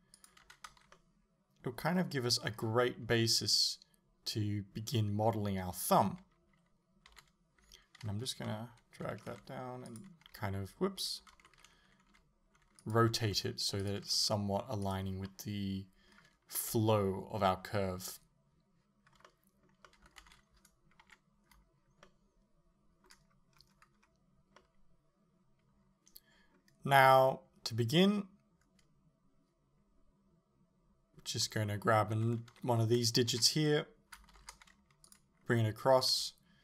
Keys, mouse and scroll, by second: 0.3 click, 0.8 a, 1.0-10.3 middle drag, 6.1 KP_3, 7.1 KP_1, 8.5 l, 9.4 r, 10.3 h, 11.4 alt+h, 12.2 g, 13.0 click, 13.3 s, 13.9 click, 14.2 r, 15.0 click, 15.3-16.7 middle drag, 16.7 KP_1, 19.3-20.3 middle drag, 20.3 a, 21.1 KP_7, 22.1-35.2 shift+middle drag, 23.6-24.6 scroll up 2, 32.5 l, 33.4 KP_7, 34.4 shift+d, 35.2 click, 36.1 r.